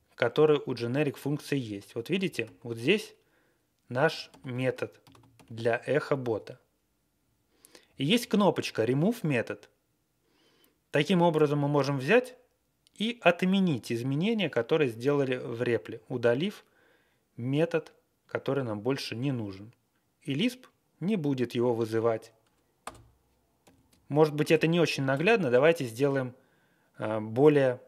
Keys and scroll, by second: 1.6 Up, 2.2 ctrl+space, 2.4 ctrl+e, 4.2 ctrl+g, 5.0 ctrl+c, 5.3 b, 7.8 Left, 8.0 Left, 8.2 Left, 22.8 Return, 23.6 alt+shift+., 23.6 q, 24.5 ctrl+l, 25.1 ctrl+l.